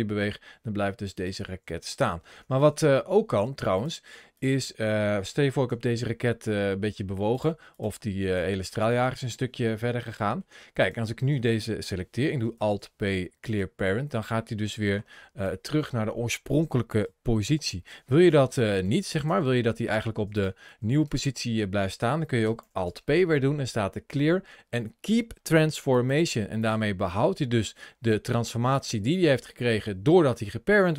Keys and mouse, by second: 1.0 right click, 2.1 ctrl+z, 2.4 ctrl+z, 3.0 ctrl+z, 5.5 g, 8.2 g, 8.9 click, 10.0 shift+middle click, 10.6 click, 12.4 alt+p, 15.2 ctrl+shift+a, 20.2 click, 20.5 ctrl+z, 20.9 ctrl+z, 22.4 alt+p, 26.4 click, 26.9 middle click, 28.0 ctrl+shift+a, 28.2 ctrl+shift+a.